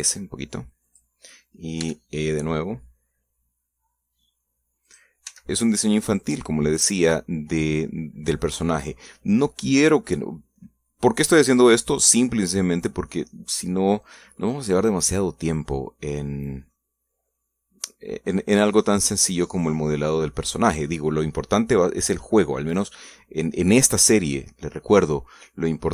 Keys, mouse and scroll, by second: 0.5 s, 1.6 click, 2.6 e, 5.7 click, 6.0 s, 7.0 click, 7.4 scroll down 2, 8.3-11.0 middle drag, 12.5-12.8 scroll up 1, 13.1-13.5 scroll down 1, 16.6 scroll down 1, 17.5-20.2 middle drag, 20.4 scroll up 1, 20.8-22.0 middle drag, 24.8-25.9 middle drag.